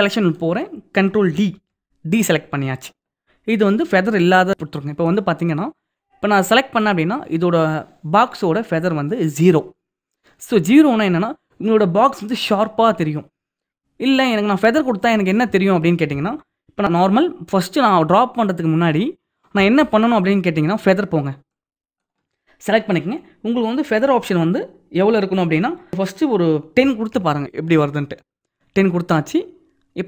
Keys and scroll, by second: 1.1 ctrl+d.